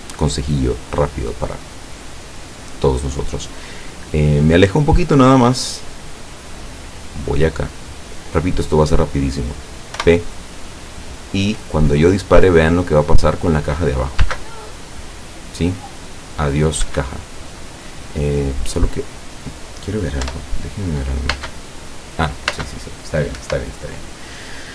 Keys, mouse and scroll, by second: 2.8-3.2 scroll down 2, 3.8-4.4 scroll down 4, 5.6-8.6 drag, 10.1 p, 14.3 space, 16.9 Escape, 17.6-19.6 drag, 20.3 p, 21.4 space, 22.6 space, 23.4 Escape.